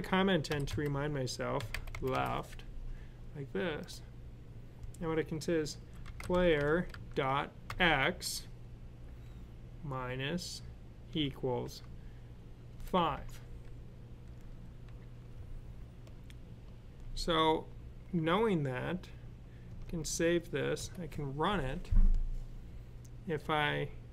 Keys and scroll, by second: 0.1-2.0 typing, 5.4-7.5 typing, 9.6 typing, 10.9 typing, 12.5-13.0 typing, 19.5 s.